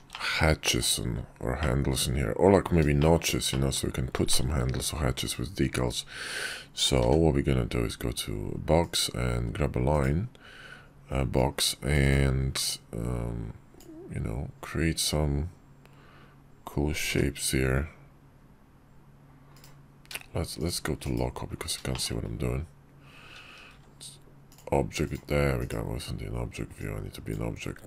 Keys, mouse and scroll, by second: 1.3-2.4 middle drag, 2.7 shift+middle drag, 3.2-3.5 middle drag, 4.0 shift+middle drag, 5.0 click, 6.7 d, 9.6 click, 11.1-11.7 drag, 12.4-13.5 drag, 20.3 shift+click, 20.7 /, 21.6 shift+middle click, 23.4 shift+v, 24.9 right click, 25.3 /, 26.6-27.8 drag.